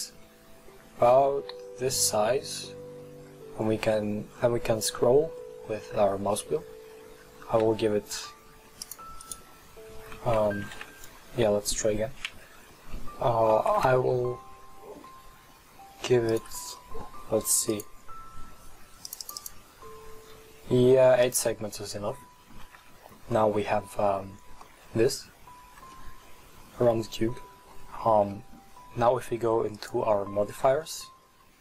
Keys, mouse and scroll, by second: 9.3 right click, 10.7 ctrl+z, 12.3 ctrl+z, 13.8 ctrl+b, 17.8 drag, 19.1-20.2 drag, 21.3 click, 22.2-25.5 middle drag, 25.5-26.0 scroll down 1, 26.0-28.1 middle drag, 28.1 Tab, 28.4-29.8 middle drag, 29.8 click.